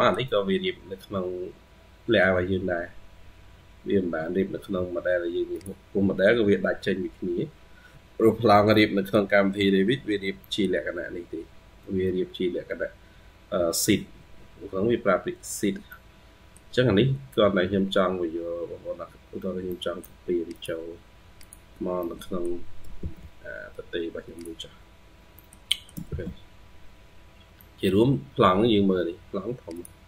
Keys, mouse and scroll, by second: 2.1-2.9 scroll up 2, 4.6 scroll down 1, 6.2-6.6 scroll down 3, 7.0-8.4 scroll up 4, 8.5 scroll up 6, 8.6 middle click, 9.6-10.3 scroll down 1, 10.3 middle click, 11.6-12.7 scroll up 2, 13.3-14.3 scroll up 4, 15.1-15.7 scroll down 4, 15.7 middle click, 17.0-17.6 scroll up 2, 17.6-18.8 scroll up 2, 19.2 scroll down 2, 19.5 middle click, 21.9 middle click, 22.8 ctrl+c, 25.0 scroll down 1, 25.2 middle click, 25.5 middle click, 26.0 ctrl+v, 26.9-27.3 scroll down 7, 27.4 middle click, 28.7-29.8 scroll up 2.